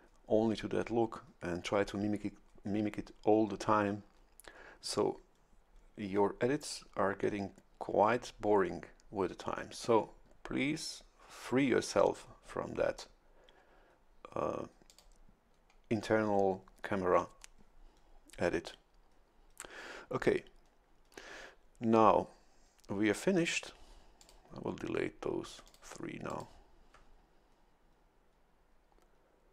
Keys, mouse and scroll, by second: 14.9 click, 24.2 click, 25.6 ctrl+click, 26.3 ctrl+click.